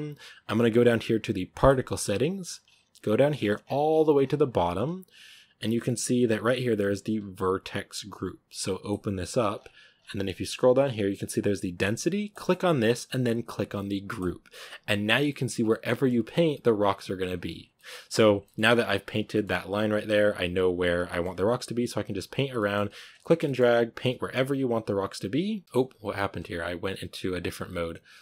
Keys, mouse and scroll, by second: 14.1-15.1 drag, 15.1 middle click, 15.4 scroll down 3, 15.5 middle click, 16.2-16.5 scroll up 2, 16.5-17.6 drag, 17.6 middle click, 17.9 f, 18.3-19.9 middle drag, 19.9-21.0 drag, 21.0 middle click, 21.2-22.4 drag, 22.4 middle click, 22.7 click, 23.0 scroll down 3, 23.1-23.6 shift+middle drag, 23.6 click, 24.0 f, 24.2 click, 25.1-25.6 drag, 25.7-28.2 drag.